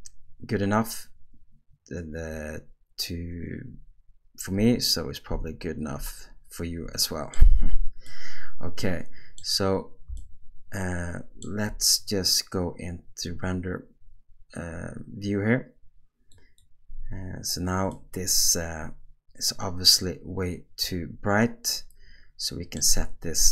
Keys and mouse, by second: 8.1-9.4 middle drag, 10.2-11.4 ctrl+middle drag, 16.6 click, 17.9-23.3 middle drag.